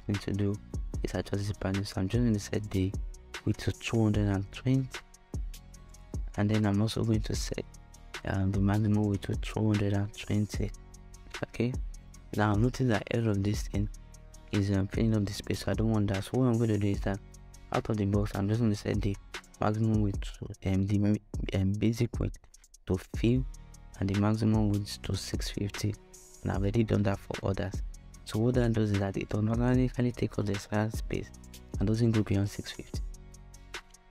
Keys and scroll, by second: 3.2-5.1 typing, 7.8-9.6 typing, 14.6 shift+Return.